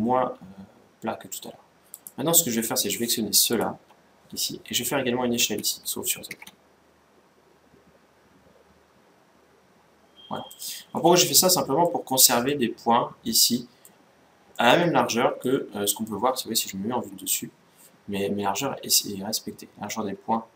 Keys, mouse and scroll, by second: 1.6-5.2 right drag, 5.2 s, 10.7-14.0 middle drag, 14.3-15.8 middle drag, 16.7 KP_7.